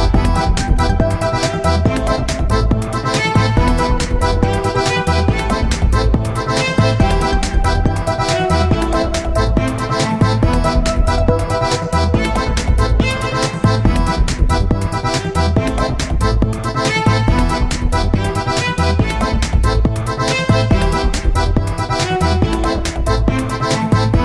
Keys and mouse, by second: 4.2-6.6 middle drag, 6.7-8.5 middle drag, 9.1-12.2 middle drag, 12.4 a, 13.8-15.6 drag, 15.2 a, 16.0-17.9 drag, 18.4 ctrl+a, 22.7-24.2 right drag.